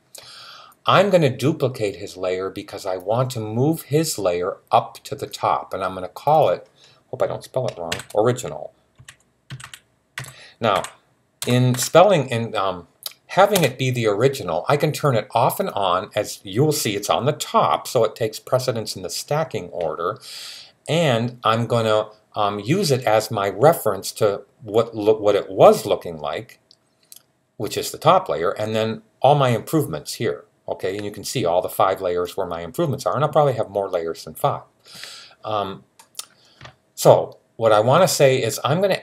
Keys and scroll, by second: 7.7-11.5 typing.